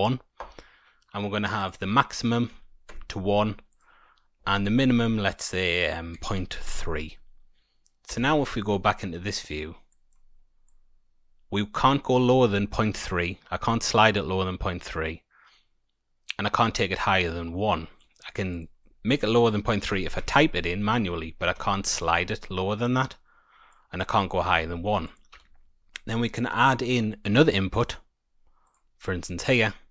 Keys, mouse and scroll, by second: 1.5 click, 3.6 click, 8.0 Tab, 8.9-9.8 scroll up 5, 9.8 click, 9.8 scroll up 2, 10.6 click, 18.5 click, 21.6 ctrl+z, 22.8 click, 25.0 click, 25.4 Tab, 25.9 middle click, 26.2-27.7 scroll down 3, 27.7 click, 28.6 click.